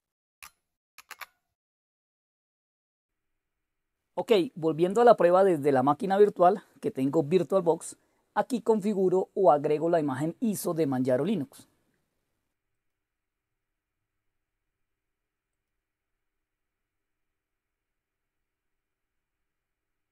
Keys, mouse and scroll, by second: 0.4 shift+click, 0.9 super+q, 6.1 click, 12.7 click, 15.5 click.